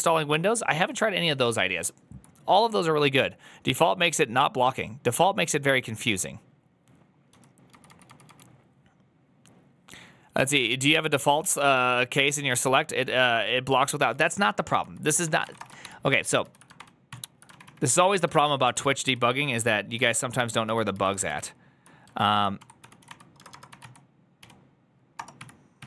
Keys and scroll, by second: 7.5 j, 8.8 k, 15.0-15.9 typing, 16.0 ctrl+u, 17.0 ctrl+d, 17.0 ctrl+t, 17.4 ctrl+o, 18.7 ctrl+u, 20.0 ctrl+u, 21.0 ctrl+u, 21.5 ctrl+u, 22.2-25.8 typing.